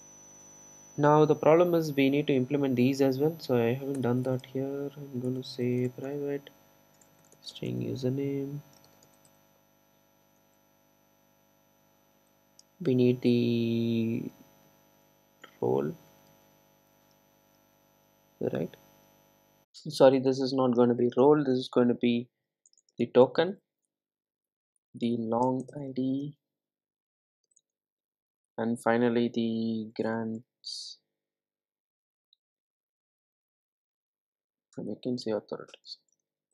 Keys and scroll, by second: 6.1 Return, 10.3 super+d.